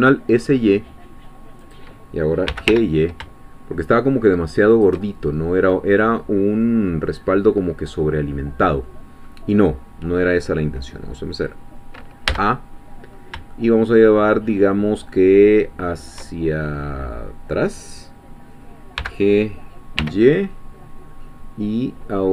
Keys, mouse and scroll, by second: 1.6 click, 2.5 g, 2.7 y, 4.7 shift+click, 5.0-6.8 shift+middle drag, 7.5 scroll down 2, 8.0-11.7 middle drag, 11.7-12.0 scroll down 2, 12.3 a, 12.7-13.3 scroll down 2, 13.5 shift+scroll down 2, 19.0 g, 20.0 y.